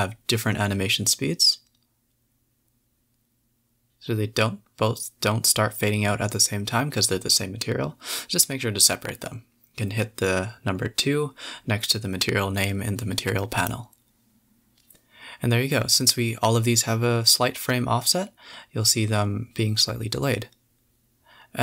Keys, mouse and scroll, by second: 0.9 scroll down 2, 1.2 space, 2.9 a, 3.0 a, 5.4 space, 5.8 click, 6.1 s, 8.3 a, 9.2 click, 10.7 shift+click, 11.2-13.6 typing, 12.4 scroll down 2, 14.2-14.6 scroll up 3, 21.2 Left.